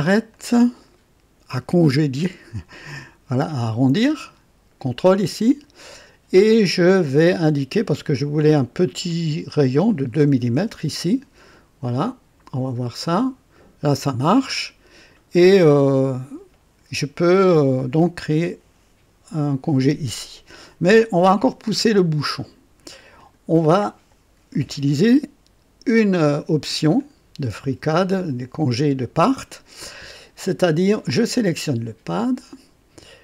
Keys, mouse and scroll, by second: 0.2 click, 4.7 ctrl+click, 9.0 click, 10.5 KP_2, 12.9 click, 23.1 click, 26.9 click, 32.0 click.